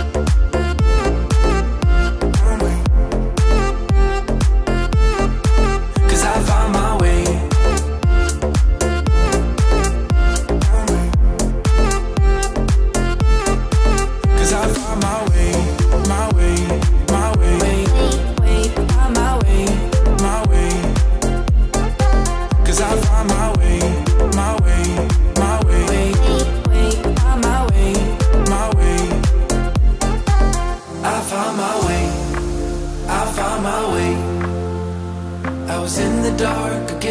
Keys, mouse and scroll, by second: 2.3-11.5 drag, 13.7 0, 13.9 Return, 15.7 click, 16.1 click, 18.8-19.5 scroll up 1, 19.7 typing, 20.5-22.8 drag, 23.3-26.3 typing, 25.2 click, 28.3 typing, 28.6-33.4 drag, 31.1 typing, 34.2-35.3 typing, 36.5-37.1 typing, 36.8-37.1 drag.